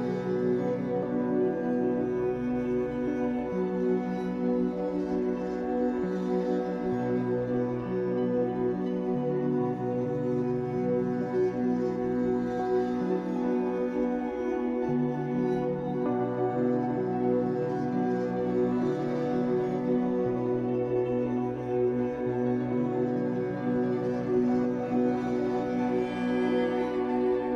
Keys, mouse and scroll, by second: 1.1 click, 1.6-4.3 middle drag, 2.1-2.4 scroll down 2, 2.4 z, 3.9-4.3 scroll up 2, 4.3 click, 4.5 middle click, 5.0 click, 6.0 click, 7.4 click, 9.0 ctrl+z, 9.2-16.7 middle drag, 10.3 Tab, 10.9-11.2 scroll down 2, 11.5-12.0 scroll up 2, 12.0 Tab, 13.0 KP_1, 13.3 z, 14.4-14.8 scroll up 2, 14.8 b, 16.7 right click, 17.0 ctrl+z, 17.9 alt+a, 18.5 b, 20.4 click, 20.7 alt+a, 21.4 b, 23.9 click, 24.1-26.3 shift+middle drag, 24.8 z, 25.3 scroll up 2, 26.3-27.5 drag.